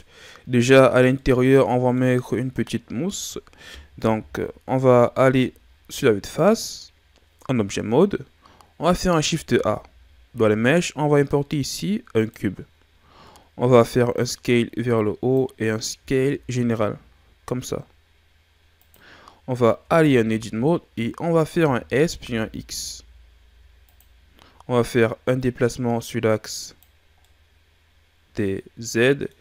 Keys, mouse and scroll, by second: 1.1-2.2 middle drag, 2.2-2.8 scroll up 2, 2.8-4.0 scroll down 2, 4.0 KP_1, 9.3 shift+a, 14.2 click, 15.9 s, 19.8 Tab, 21.6 s, 25.3 click, 27.2-29.4 middle drag.